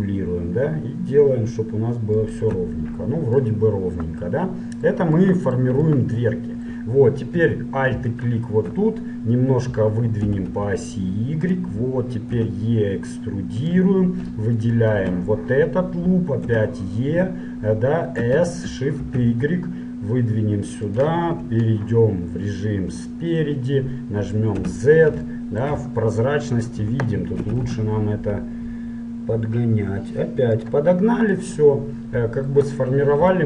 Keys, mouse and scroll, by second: 2.9-8.2 middle drag, 8.2-10.2 right drag, 10.2-11.4 middle drag, 10.4 g, 12.4 e, 14.6-16.6 right drag, 16.6 e, 21.2 KP_1, 22.8-24.8 middle drag, 24.8 z, 25.4-28.2 middle drag, 27.6 s, 31.0-33.4 middle drag.